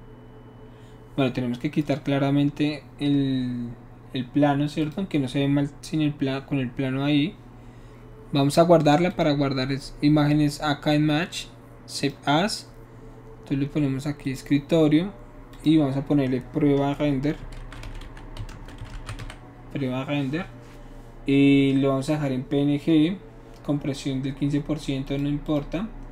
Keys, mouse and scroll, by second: 4.8 click, 9.1 click, 12.0 click, 14.2 click, 15.5 click, 17.5-19.5 typing, 25.0 click, 25.4 click.